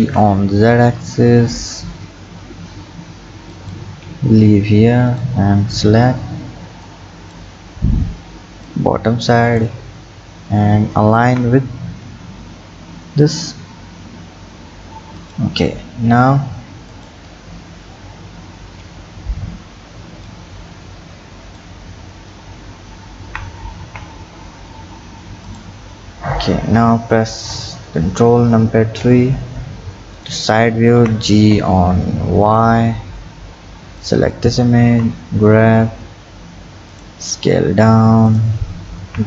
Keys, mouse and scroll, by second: 4.8-5.1 scroll down 2, 5.1 click, 6.9 click, 16.9 click, 22.0-23.3 scroll up 5, 23.3 g, 26.4-26.8 scroll, 26.8 Tab, 27.5 KP_3, 28.8 ctrl+KP_3, 30.2 click, 31.0 g, 34.9 g, 37.2 s, 39.0 g.